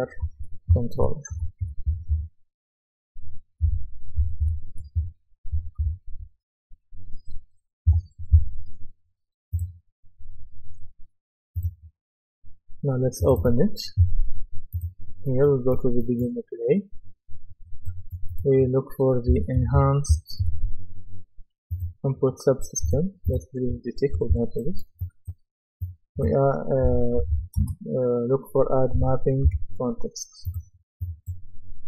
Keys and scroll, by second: 0.0-2.6 typing, 3.7-6.3 typing, 7.9 Return, 19.1-20.9 typing, 24.2 Delete, 26.6-27.8 typing, 29.0-29.5 typing.